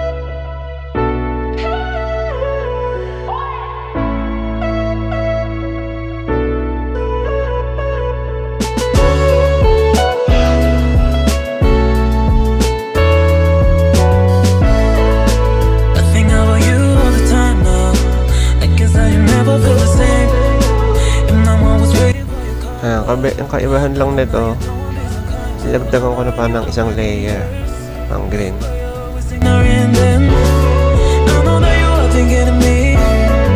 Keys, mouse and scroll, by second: 1.3 click, 2.6 click, 4.1 click, 8.4 click, 11.2 click, 12.6 click, 14.2 click, 16.8 click, 24.2 click, 25.9 click.